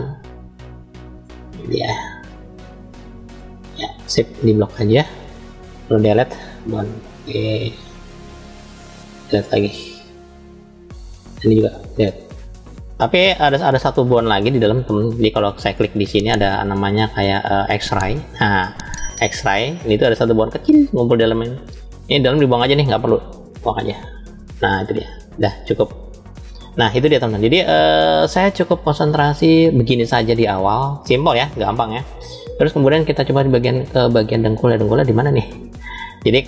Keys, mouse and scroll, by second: 1.4-2.9 drag, 3.2 middle click, 4.1 click, 5.5 Delete, 7.3 click, 7.9-8.9 drag, 9.7 Delete, 10.9 click, 11.6 Delete, 17.3 click, 18.7 click, 19.3 click, 20.4 click, 21.3 click, 23.3 Delete, 25.8 click, 26.6-27.6 middle drag, 27.6-28.3 scroll down 2, 28.9-30.0 middle drag, 28.9 scroll down 1, 30.0 scroll down 2, 31.3-32.3 middle drag, 32.7 shift+middle click, 33.8-34.4 scroll up 2, 34.4-36.4 middle drag.